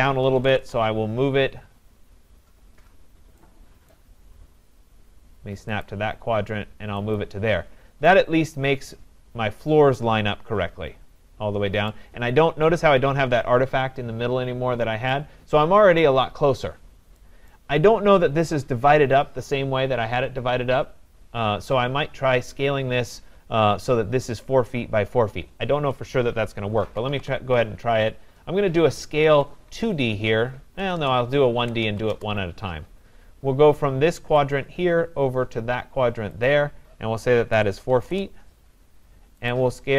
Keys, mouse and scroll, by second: 0.0-1.1 typing, 2.2 typing, 3.9 right click, 4.6-5.0 scroll, 5.9 click, 7.2 click, 7.7 middle click, 7.8 middle click, 9.8 scroll, 11.9 right click, 16.0 right click, 17.5 right click, 17.8 scroll, 21.5-22.5 scroll, 22.5 scroll, 23.0 scroll up 5, 26.6-27.6 typing, 28.9-32.2 typing, 38.1 Return, 38.1 click, 39.5 right click.